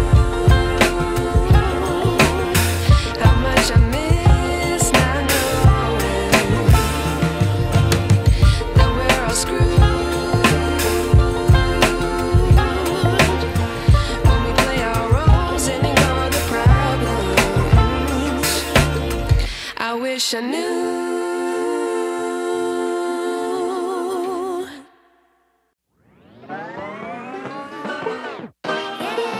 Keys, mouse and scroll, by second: 2.6 ctrl+alt+shift+e, 4.3 right click, 5.0 click, 10.1 click.